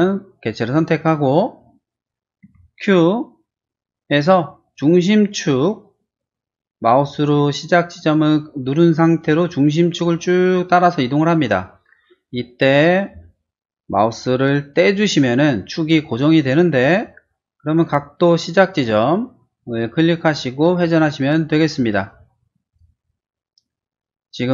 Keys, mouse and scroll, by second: 1.5 middle click, 2.4 q, 9.2-14.7 drag, 15.8-16.9 middle drag, 20.1 click, 22.6 click, 23.3 middle click, 24.2 middle click.